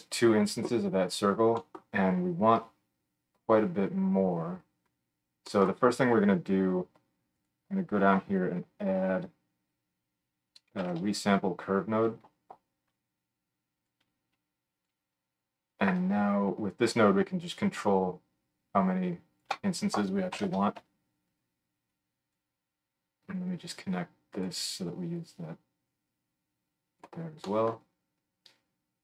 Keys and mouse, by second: 7.4-17.3 middle drag, 8.6 F3, 17.3-29.0 shift+drag.